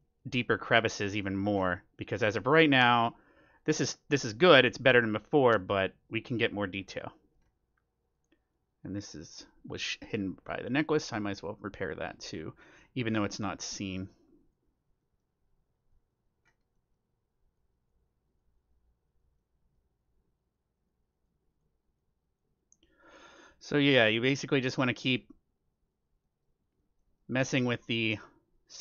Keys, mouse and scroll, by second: 2.7-12.4 drag, 13.2-28.8 drag, 15.0-16.6 middle drag, 16.7-18.3 middle drag, 19.3-21.0 middle drag, 22.8-28.7 middle drag.